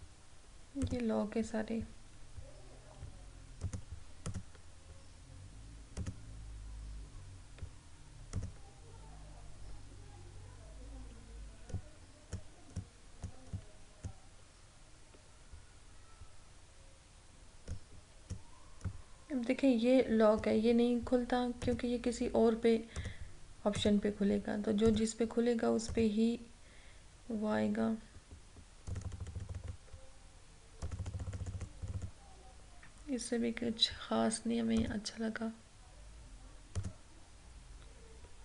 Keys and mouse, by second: 3.6 click, 8.3 click, 11.7-16.4 drag, 17.8-21.7 drag, 29.0 click, 34.9 click.